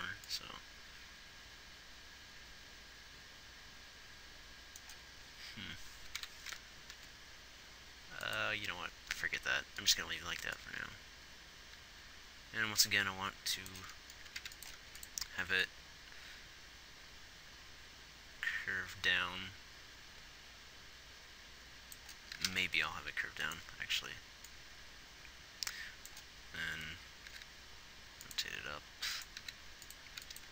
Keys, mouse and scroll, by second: 6.5 Left, 7.4 r, 22.6 g, 27.6 g, 29.7 g, 30.4 b.